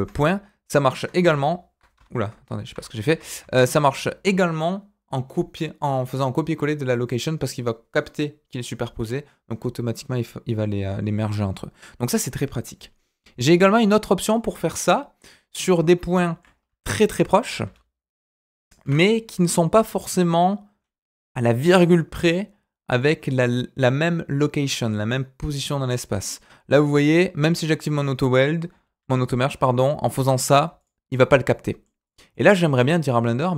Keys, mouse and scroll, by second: 2.7 ctrl+z, 3.0 ctrl+z, 13.7 click, 14.4-14.8 scroll down 2, 14.8-15.8 middle drag, 15.8 scroll up 1, 16.2 shift+middle click, 16.4 scroll up 1, 16.5-17.1 scroll down 1, 17.1 middle click, 17.6 a, 18.8 shift+d, 25.5 middle click, 26.3-29.0 scroll up 1, 29.0 g, 31.1 middle click, 32.0 click, 32.3 middle click, 32.9 click.